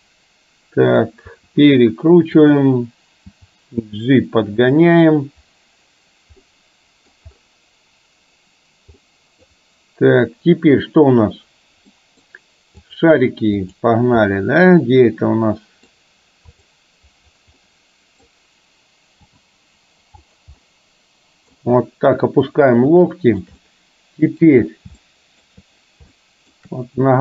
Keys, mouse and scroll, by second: 0.0-1.0 middle drag, 1.4 r, 3.4 g, 6.5-7.1 middle drag, 9.1 middle click, 12.0-12.4 middle drag, 14.3-16.0 middle drag, 16.6 click, 17.6-18.3 middle drag, 19.4 g, 20.6-21.8 middle drag, 23.1-23.5 shift+middle drag, 23.6-24.5 middle drag, 25.1-25.5 shift+middle drag, 26.3 shift+middle click.